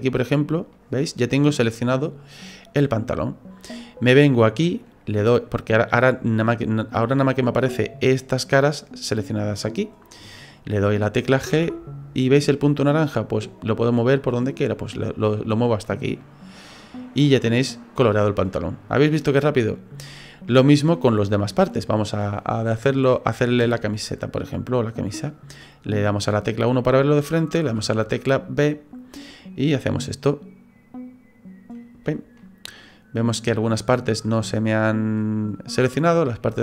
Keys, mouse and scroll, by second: 0.7 middle click, 11.5 g, 17.2 middle click, 23.6 KP_1, 27.7 b, 32.4 middle click, 33.4-33.9 scroll up 3, 35.7 click.